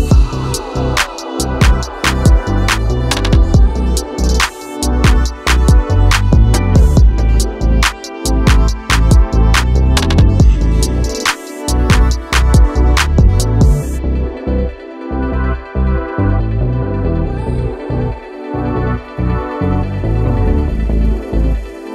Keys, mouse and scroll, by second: 0.8-2.1 drag, 2.4-7.6 drag, 9.8 3, 10.4-11.9 right drag, 13.3 click, 13.9 click, 14.6 middle click, 15.2-18.1 drag, 18.8-21.9 drag.